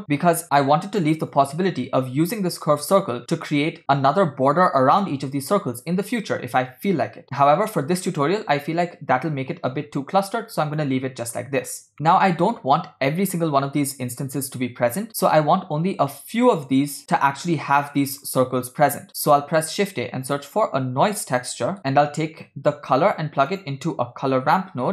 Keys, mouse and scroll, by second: 0.6-1.3 scroll up 4, 1.4-2.9 drag, 3.2 scroll up 1, 3.6 shift+middle click, 3.8 scroll up 1, 7.5-9.0 scroll down 3, 10.6 scroll down 1, 10.9 middle click, 11.8 scroll down 1, 12.0 shift+middle click, 19.2 middle click, 19.6 shift+a, 23.0 shift+a.